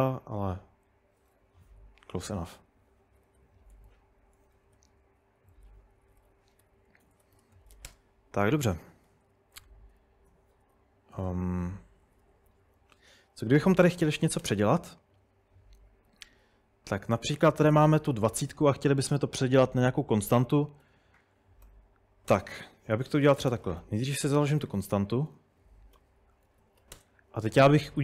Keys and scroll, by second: 1.6-2.1 typing, 3.2-7.9 typing, 9.1-14.5 typing, 13.7 Escape, 16.1 typing, 17.8-18.6 typing, 20.2-27.5 typing.